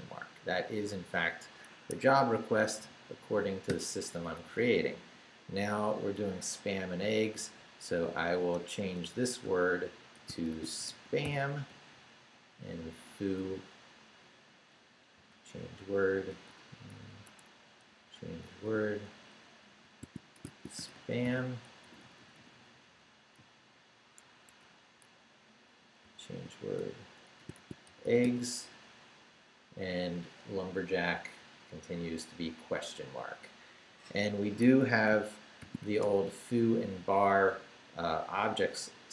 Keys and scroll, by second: 1.7 Escape, 2.5 y, 4.4 Right, 8.4-11.7 typing, 11.9 Right, 13.5 Right, 15.1 c, 15.6 w, 16.3 BackSpace, 17.2 Escape, 17.6 Right, 17.9 c, 18.6 w, 19.7-21.7 typing, 24.5 Escape, 24.9 Right, 25.8-28.7 typing, 34.6 Escape, 35.4-36.3 typing.